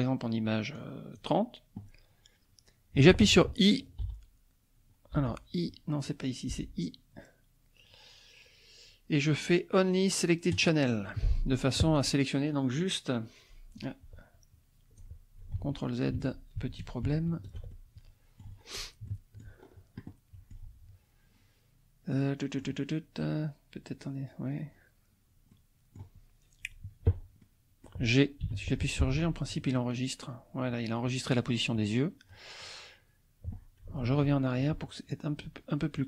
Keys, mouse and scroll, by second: 0.8 click, 5.1 i, 6.5 i, 10.5 click, 12.0 click, 12.8 click, 13.8-15.1 drag, 15.5 ctrl+z, 15.5-16.8 ctrl+drag, 17.7 ctrl+click, 18.6 scroll up 1, 19.1 shift+click, 19.6 shift+scroll up 1, 20.1 click, 22.1 click, 25.5 click, 27.4 click, 28.4 g, 29.0 Escape, 34.0 ctrl+z, 35.9-36.0 drag.